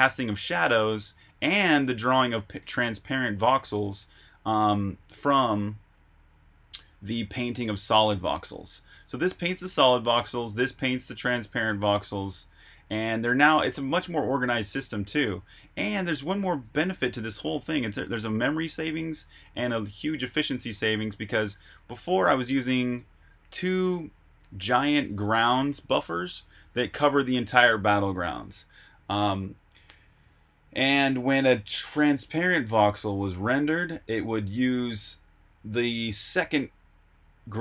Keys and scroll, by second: 1.1-2.5 typing, 3.7-5.0 typing, 8.6-11.4 typing, 13.8 typing, 15.3-23.3 typing, 24.4 typing, 25.8 typing.